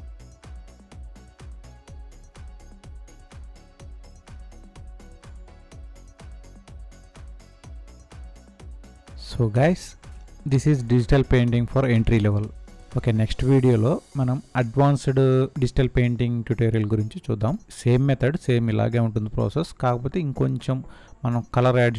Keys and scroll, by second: 4.2 ctrl+a, 5.6 ctrl+a, 6.0 Down, 7.3 Up, 7.9 Up, 18.8 ctrl+a.